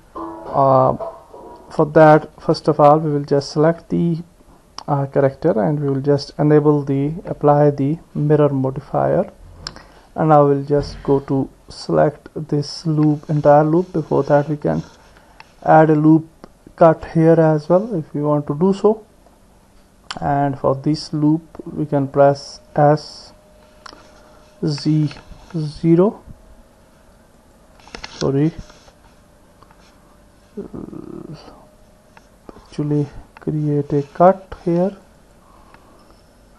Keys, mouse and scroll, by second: 2.3 Tab, 7.2 click, 9.9 Tab, 15.2 ctrl+r, 18.0 middle click, 18.1-19.3 drag, 21.7 click, 23.8 s, 29.0 ctrl+z, 31.1 ctrl+z, 34.4 ctrl+r.